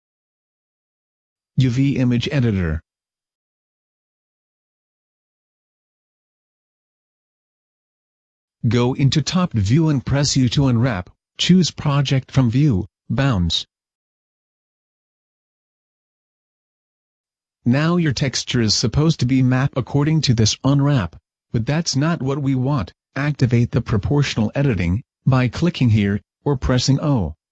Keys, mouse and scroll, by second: 0.6 click, 3.8 click, 3.8-6.1 scroll down 1, 6.1-6.5 scroll up 5, 6.1 KP_7, 6.5 KP_5, 7.0 Tab, 7.5-8.6 scroll up 2, 8.6 a, 14.1 u, 19.9 click, 20.6 right click.